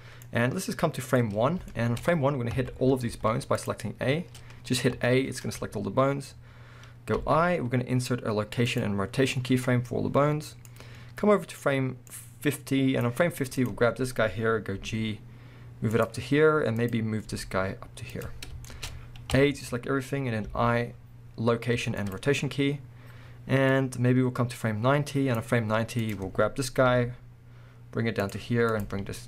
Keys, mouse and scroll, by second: 1.7 shift+middle click, 2.5 a, 3.1 z, 6.2-7.2 scroll up 2, 7.2 i, 9.2-10.8 middle drag, 10.8-13.7 drag, 13.8-14.3 scroll down 1, 14.3-14.8 scroll up 1, 14.8 g, 16.0 click, 16.8 click, 17.3 g, 18.2 click, 18.4-18.7 scroll down 1, 18.7-23.8 shift+middle drag, 19.1 scroll up 1, 19.3 a, 20.5 i, 23.8-26.1 drag, 26.5-26.9 scroll down 1, 26.9 g, 28.7 click, 28.8 g.